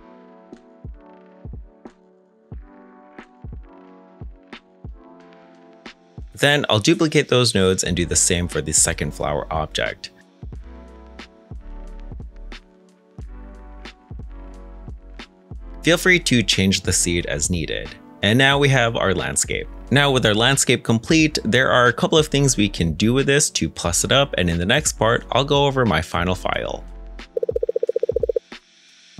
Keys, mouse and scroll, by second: 7.5 middle click, 7.8 shift+d, 8.0 z, 9.6 middle click, 12.2 g, 19.8 middle click, 22.0 shift+middle click, 23.4 middle click.